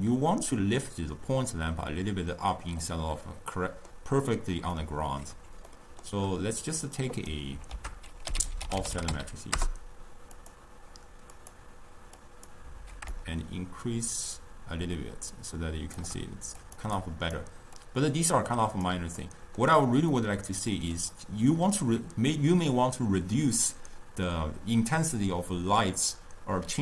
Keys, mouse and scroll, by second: 2.9-5.4 middle drag, 5.4-5.8 scroll down 2, 5.8-6.9 middle drag, 6.9 click, 7.8 ctrl+a, 8.6 f, 11.9 click, 12.3-16.2 drag, 16.7 click, 17.1-18.0 drag, 19.3-23.3 middle drag.